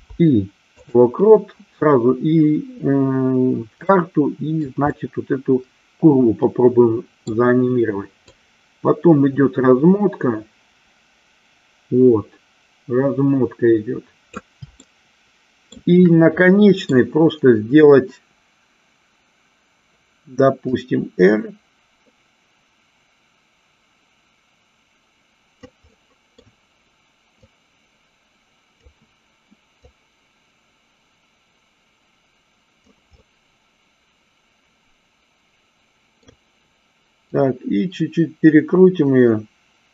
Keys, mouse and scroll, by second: 4.2-5.0 middle drag, 5.2-7.5 middle drag, 8.5-14.6 drag, 15.2-16.0 shift+middle drag, 16.6 middle click, 21.0-25.9 drag, 26.2 middle click, 27.8-29.2 drag, 30.2-33.3 drag, 33.5-36.4 middle drag, 36.4 scroll down 1, 37.5-39.9 drag.